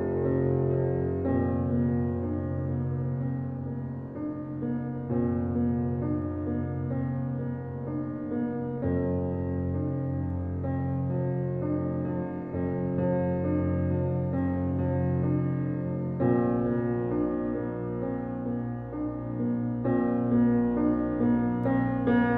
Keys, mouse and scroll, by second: 3.7 click, 16.6 click, 17.9 alt+right click, 18.7 click, 19.1 middle click, 19.1 alt+middle click, 19.8 click, 20.0 alt+click, 21.0 alt+right click, 22.2 alt+middle click.